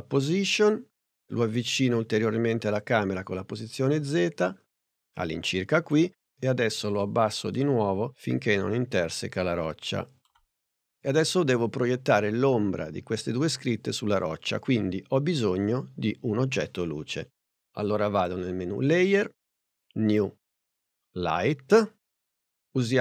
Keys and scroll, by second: 0.1 p.